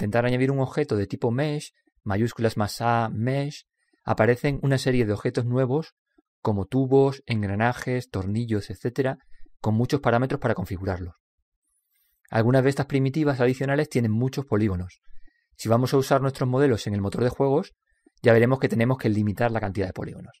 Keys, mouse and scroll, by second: 12.7-17.0 drag, 17.4-20.4 drag.